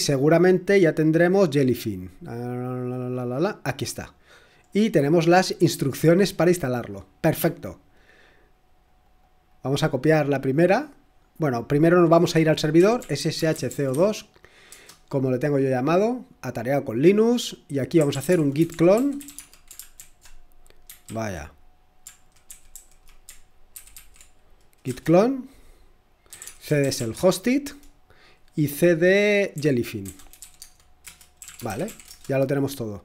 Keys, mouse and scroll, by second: 1.1 scroll down 1, 3.4 click, 4.7-5.9 scroll down 1, 5.9-6.4 scroll up 1, 6.4-7.6 scroll up 1, 7.6-8.4 scroll up 1, 8.9 click, 10.2 click, 11.7 click, 12.5-14.4 typing, 14.7 Return, 17.8-19.7 typing, 20.0 ctrl+alt+v, 21.1 ctrl+a, 22.5 alt+f, 22.7 alt+f, 23.7 ctrl+w, 23.9 ctrl+w, 24.9 Return, 26.0-27.6 typing, 29.5 Tab, 29.8-32.6 typing.